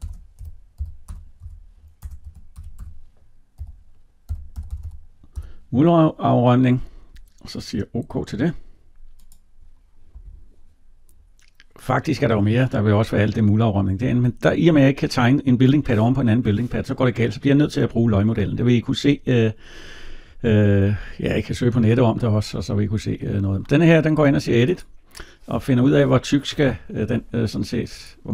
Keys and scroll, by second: 1.8 BackSpace.